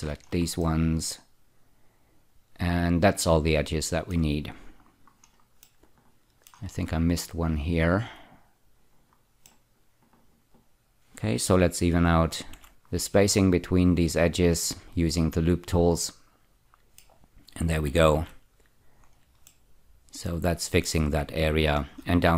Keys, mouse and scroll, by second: 0.6 middle click, 4.9-5.6 scroll up 2, 5.6 middle click, 7.6 shift+click, 8.4-9.5 scroll down 2, 9.5 middle click, 12.5 ü, 13.1-17.2 middle drag, 18.2 z, 19.0-19.5 scroll down 1, 19.5-21.1 middle drag, 21.4-21.9 scroll up 4.